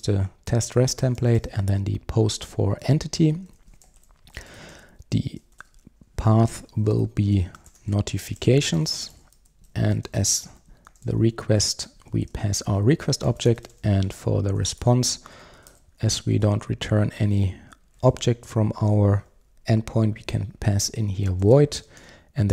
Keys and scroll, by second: 11.8 Return, 20.3 Return.